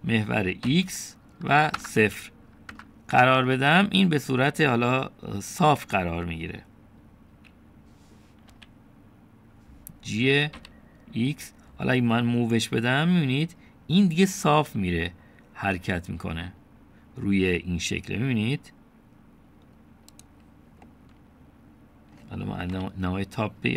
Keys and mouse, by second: 0.2 s, 9.5 g, 21.9-23.1 drag, 23.1 middle click.